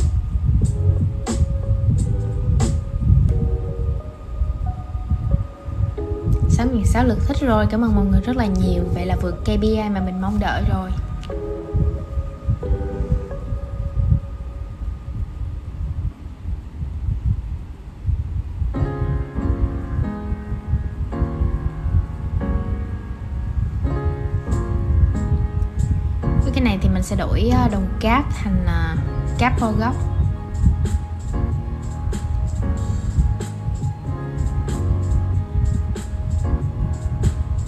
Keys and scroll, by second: 22.9 super+}.